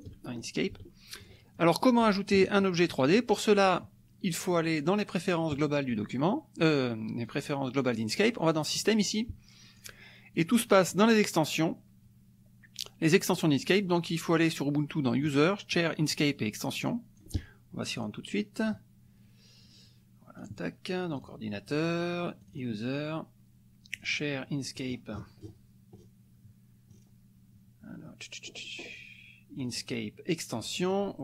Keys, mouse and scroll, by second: 0.6 click, 1.6-3.1 ctrl+drag, 2.6 ctrl+right click, 3.3 ctrl+click, 5.5 click, 7.2 click, 8.7 click, 9.8-11.6 drag, 16.9 click, 18.0 click, 20.4 click, 21.1 click, 22.5 click, 23.9 click, 24.8-26.2 scroll down 5, 26.9 scroll down 2, 29.6 click, 30.7 click.